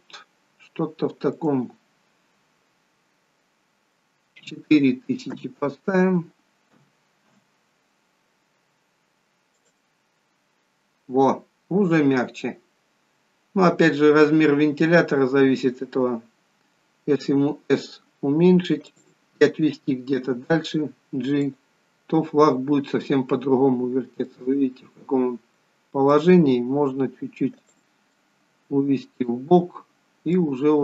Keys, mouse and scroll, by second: 1.4 click, 9.6 click, 19.0 s, 20.3 g, 24.5 middle click, 26.9 g, 28.2 middle click.